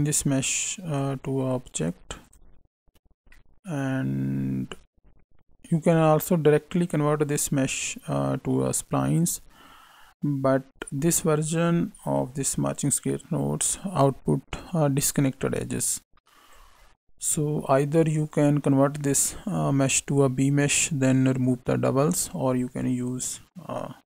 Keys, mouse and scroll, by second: 1.7 click, 2.2 click, 3.3 middle click, 5.0 click, 6.9 click, 14.0 click, 18.3 click, 22.6 click.